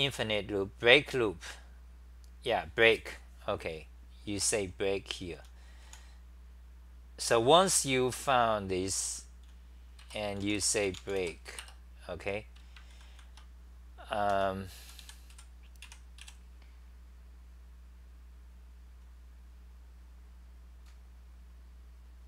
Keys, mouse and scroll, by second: 5.1-6.4 typing, 7.5 c, 7.7 c, 8.9 t, 9.2 t, 10.4 Return, 10.4 u, 11.6 Return, 13.1 ctrl+c, 14.4 Home, 14.8-16.7 typing.